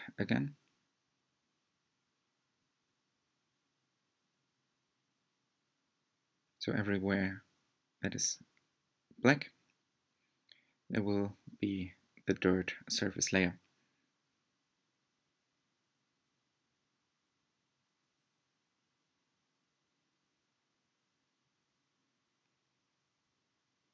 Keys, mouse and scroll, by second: 1.1-3.0 scroll up 13, 3.4-11.2 middle drag, 11.2 click, 13.8-17.3 drag, 17.4-20.4 drag, 22.3 click.